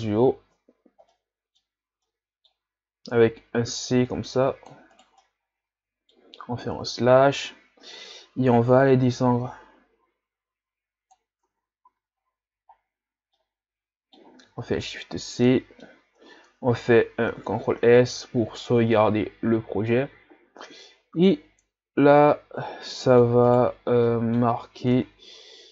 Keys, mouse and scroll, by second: 0.0 KP_Divide, 0.8 scroll down 1, 1.1-3.6 middle drag, 3.6 c, 5.2-6.7 middle drag, 6.7 KP_Divide, 8.6-11.5 drag, 11.5 Tab, 11.9 a, 12.2 scroll down 3, 13.4-14.7 middle drag, 14.7 shift+c, 15.5-17.3 middle drag, 17.3 ctrl+s, 18.0 ctrl+s, 20.7-23.5 middle drag, 23.5 right click, 23.8 scroll down 1, 24.1 middle click, 25.0 Tab.